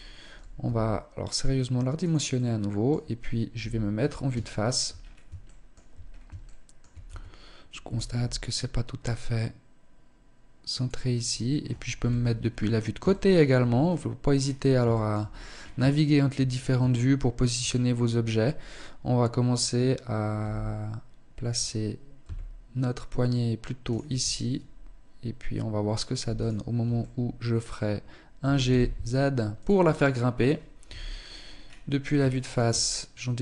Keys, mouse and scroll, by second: 0.0 s, 1.8 middle click, 3.0 KP_1, 3.8 shift+middle click, 4.3 scroll up 4, 4.7 shift+middle click, 5.1 scroll up 1, 5.6 shift+middle click, 6.2 Tab, 7.6 g, 11.4 KP_3, 11.9-12.4 scroll down 2, 12.4 scroll down 2, 12.6 shift+middle click, 13.2-13.9 scroll down 7, 14.3 shift+middle click, 14.8-15.2 scroll up 8, 15.4 shift+middle click, 16.0 scroll up 1, 16.6 shift+scroll down 2, 19.8 g, 23.5 Tab, 25.8 alt+right click, 26.4 middle click, 27.8 alt+g, 29.3-29.7 scroll down 5, 30.3 KP_1, 30.9-31.2 scroll down 2, 31.4 shift+middle click, 32.2-32.5 scroll up 2.